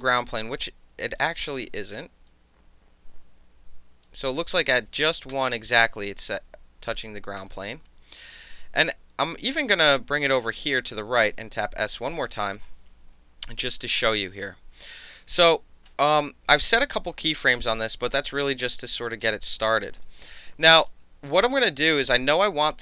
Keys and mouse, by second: 0.0 alt+right click, 0.4 alt+middle drag, 0.6-1.1 alt+right drag, 1.1-2.3 alt+middle drag, 2.3 click, 4.0-5.2 middle drag, 5.3 s, 6.2 space, 7.4 space, 8.4 alt+right click, 9.5-10.8 drag, 11.2 s, 12.5 click, 14.9 click, 18.1 alt+click, 18.3 alt+click, 18.9 alt+drag, 19.5 alt+right click, 19.8 alt+middle drag, 20.0 alt+right drag, 20.4 alt+click.